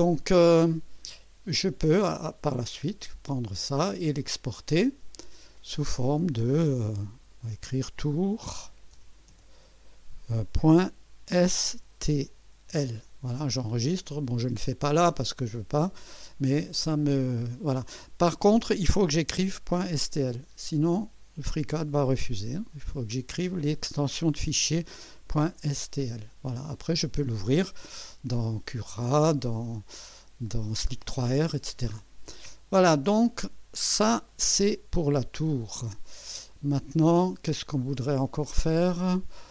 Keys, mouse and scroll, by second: 1.9 click, 3.4 click, 5.5 click, 7.1 click, 8.0-12.7 typing, 29.0 click, 31.7 scroll down 2, 32.3 click, 34.3 click, 35.1 Delete, 36.5-37.2 right drag, 37.5 scroll down 2, 38.2 right click, 39.0-39.5 drag.